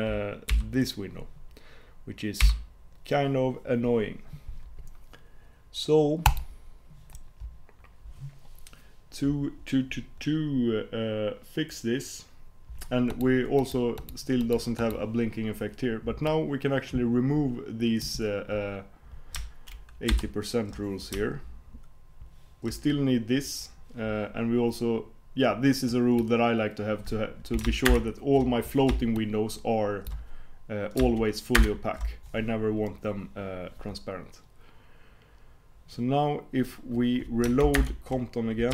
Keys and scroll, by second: 2.4 super+p, 27.9 alt+super+Return, 37.8 super+Return.